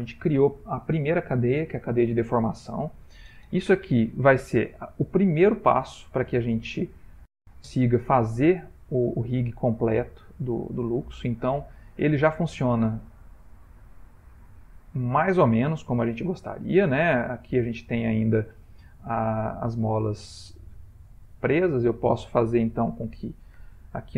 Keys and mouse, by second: 8.0 Tab, 8.8 click, 10.2 Tab, 11.1 r, 14.7 click, 16.2 r, 20.4 ctrl+middle click, 21.9 ctrl+middle click, 23.2 click.